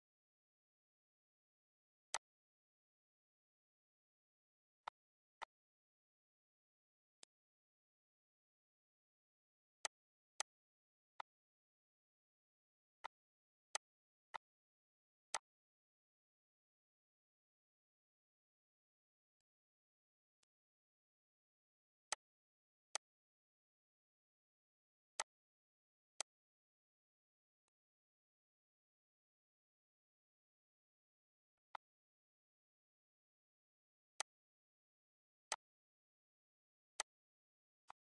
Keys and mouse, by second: 0.9 click, 3.7 click, 4.2 click, 6.1 click, 8.7 click, 10.2 click, 12.1 click, 12.7 click, 13.4 click, 14.3 click, 18.5 click, 19.7 click, 21.4 click, 22.2 click, 24.3 click, 25.2 click, 26.4 click, 29.7 click, 32.3 click, 33.7 click, 35.3 click, 36.2 click, 37.5 click.